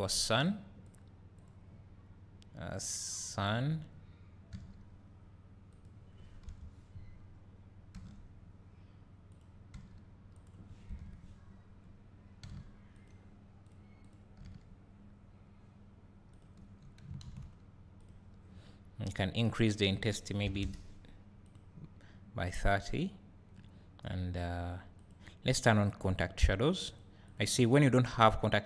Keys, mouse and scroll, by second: 3.3 click, 4.6 g, 5.8 click, 6.5 KP_7, 7.1 scroll down 1, 8.0 r, 9.4 click, 9.8 g, 10.5 click, 10.9 KP_0, 12.5 g, 13.1 click, 14.1-16.5 drag, 14.5 g, 21.5 click, 26.1 click, 26.9 click, 27.3 click.